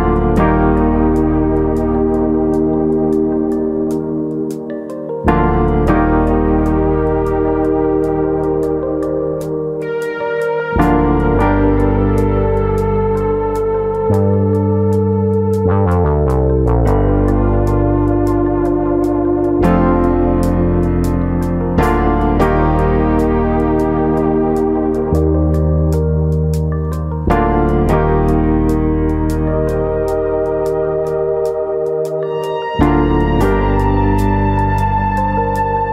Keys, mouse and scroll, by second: 0.3 click, 0.6 middle click, 2.9 g, 3.8 click, 4.3 click, 4.6 middle click, 5.0 g, 5.6 click, 6.2 click, 6.4 middle click, 6.9 click, 7.8 middle click, 10.3 click, 10.5 middle click, 11.0 click, 11.8 middle click, 13.5 click, 14.2 middle click, 14.2 click, 14.7 middle click, 15.0-15.6 scroll down 4, 15.6 KP_1, 16.8 scroll up 2, 17.0 middle click, 17.4 scroll up 2, 17.6 middle click, 18.7 alt+click, 19.4 click, 19.8 3, 20.2 alt+click, 21.6 ctrl+KP_Add, 22.7 middle click, 23.2 r, 25.4 click, 25.5 middle click, 26.1 click, 26.8 middle click, 27.3 click, 28.1 middle click, 28.7 click, 29.1 shift+click, 29.4 click, 30.0 click, 30.2 shift+click, 31.0 middle click, 31.0-32.6 scroll up 2, 31.3 shift+middle click, 32.6 i, 33.9 i.